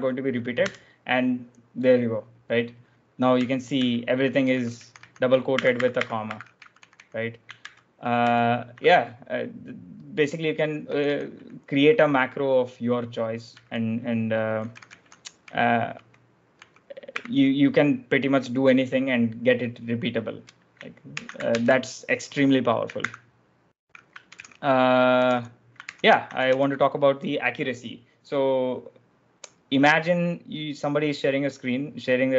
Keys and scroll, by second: 0.6 Return, 3.3 ctrl+u, 3.6 ctrl+u, 4.3 k, 4.9 k, 5.4 ctrl+d, 5.6 ctrl+d, 6.5 k, 6.6 k, 6.8 k, 7.6 ctrl+u, 8.1 ctrl+u, 10.8 k, 10.9 k, 11.2 k, 13.4-17.0 typing, 21.0 ctrl+j, 21.2-22.0 typing, 23.0 ctrl+f, 24.2 ctrl+j, 24.8-27.0 typing, 25.8 ctrl+j.